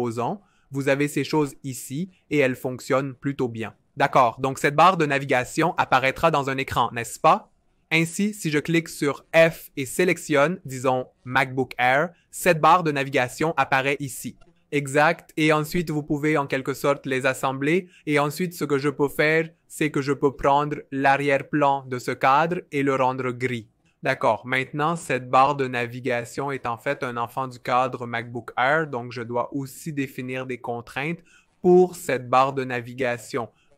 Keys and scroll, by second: 2.2 v, 5.4 typing, 7.0 f, 10.7-11.5 typing, 15.2 v.